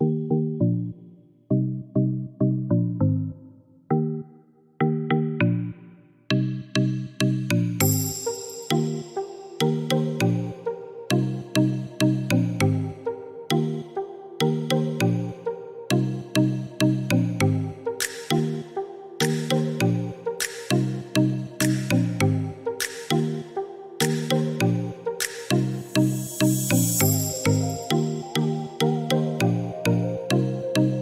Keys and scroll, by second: 12.5 7, 12.6 Return, 18.2-19.3 typing, 24.2 Delete, 26.3 Escape.